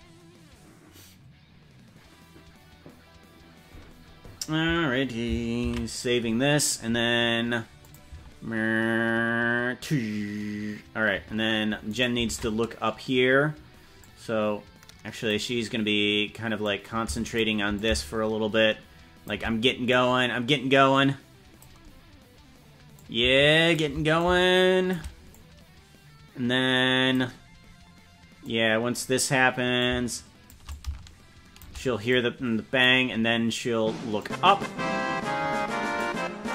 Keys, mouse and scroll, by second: 7.8 click, 8.2 space, 11.2 space, 12.0 right click, 12.4 ctrl+Tab, 14.0-15.3 drag, 16.6 click, 17.7-19.3 shift+drag, 19.9 click, 20.9 click, 22.9 shift+click, 24.1 shift+click, 25.3-27.2 drag, 28.4 click, 29.8 shift+click, 30.7 shift+click, 32.1 click, 34.2-36.0 drag.